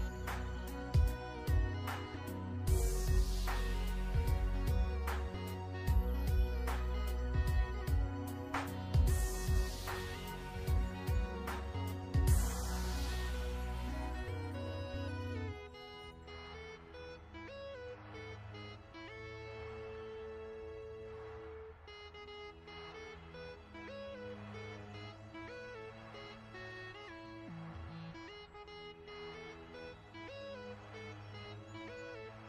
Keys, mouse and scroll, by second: 1.3 click, 3.6 click, 9.3 BackSpace, 11.0 click, 12.7 KP_1, 12.7 KP_2, 12.8 KP_Enter, 13.9 click, 15.0 v, 15.2 click, 15.8 alt+shift+scroll down 2, 16.4 click, 19.6 alt+shift+click, 21.7 alt+shift+scroll up 1, 23.0 click, 24.5 KP_2, 24.8 Return, 26.1 v, 26.5 click, 28.8 ctrl+shift+[, 29.0 typing, 30.1 click, 30.4-30.7 scroll down 1, 30.8 ctrl+scroll up 1, 32.3 click.